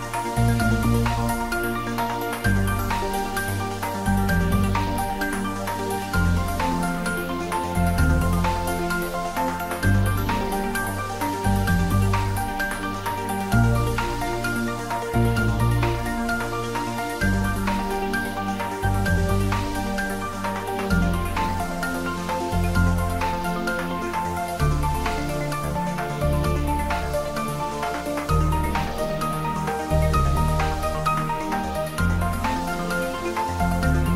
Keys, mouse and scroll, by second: 2.0 Tab, 3.6 ctrl+3, 4.0 Tab, 4.7 ctrl+r, 6.1 click, 7.5 ctrl+z, 8.3 ctrl+r, 8.6 click, 9.3 ctrl+b, 12.2 click, 12.3 Tab, 13.7 right click, 14.2 click, 14.7 ctrl+middle click, 15.6 click, 17.2-18.5 middle drag, 18.5 click, 19.7-20.6 typing, 22.5 Return, 23.2-26.4 middle drag, 26.4 ctrl+s, 27.4 click, 27.7 Tab, 29.6 click, 30.0 shift+z, 30.6 shift+z, 31.1 click, 31.7-34.1 ctrl+middle drag.